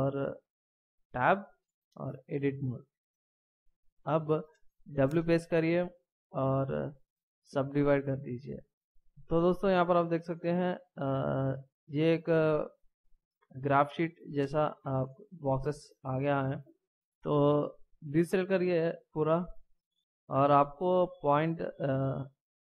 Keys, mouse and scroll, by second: 1.1 Tab, 1.5 Tab, 5.0 w, 8.1 w, 8.9 w, 15.7 middle click, 18.5 a, 19.8-20.5 scroll up 2.